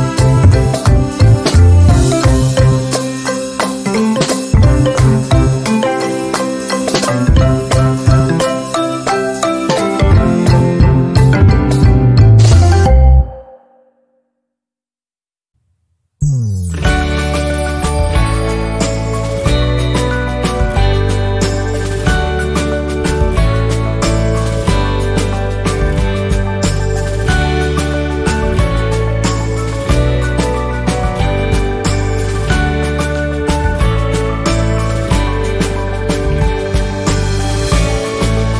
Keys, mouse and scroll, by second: 5.2-7.4 right drag, 7.9 shift+scroll down 1, 8.3 click, 11.8 z, 12.0 click, 18.7 z, 19.1 click, 21.9 F10, 23.7-24.9 drag, 25.8 Delete, 26.5-31.1 drag, 31.1-34.2 drag, 34.2 shift+scroll down 1, 34.9 z, 35.1-37.2 drag.